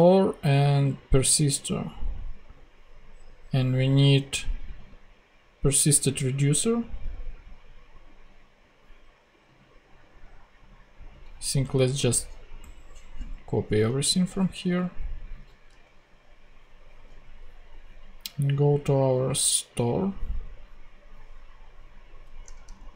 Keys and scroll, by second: 15.3 super+c, 15.6 super+Tab, 22.4 Return, 22.7 super+v.